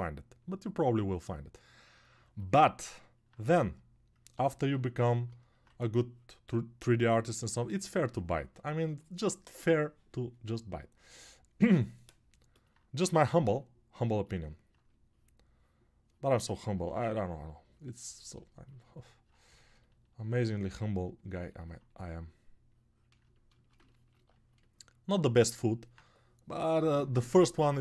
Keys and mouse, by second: 7.4 shift+1.